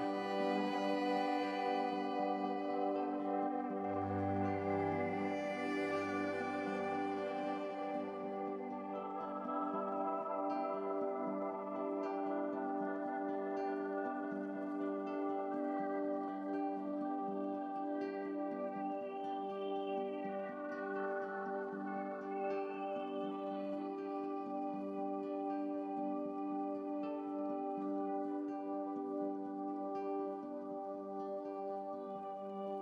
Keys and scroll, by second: 12.8 x.